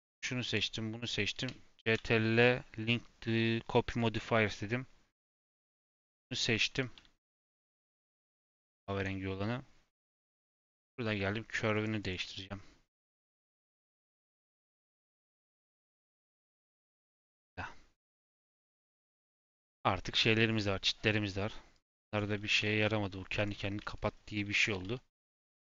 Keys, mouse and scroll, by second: 0.4 shift+click, 1.8 ctrl+l, 5.3 click, 6.8 g, 7.8 click, 8.2 click, 8.6 g, 10.5 click, 11.7 click, 11.9 click, 14.4 click, 14.7 click, 16.6 middle click, 17.2 scroll down 2, 17.9 click, 18.2 scroll down 1, 18.3 middle click, 18.9-19.3 scroll up 2, 19.3-21.7 middle drag, 21.7 click, 22.0 shift+click, 22.4 g, 23.7 shift+middle click, 24.5 g, 25.1 g.